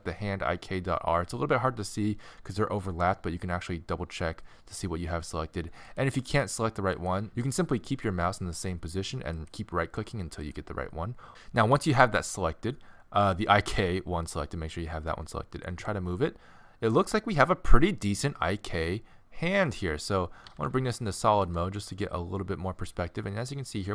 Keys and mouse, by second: 12.8-15.7 middle drag, 15.7 g, 20.5 z, 20.6 z, 21.5 g.